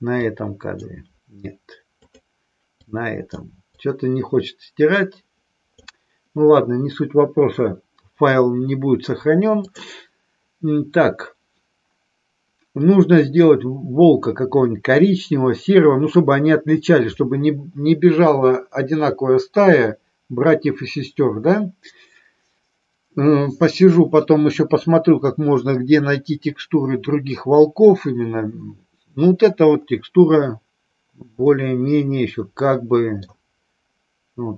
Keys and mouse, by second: 0.3-0.9 drag, 2.1 click, 2.7-5.7 drag, 31.4-33.1 middle drag.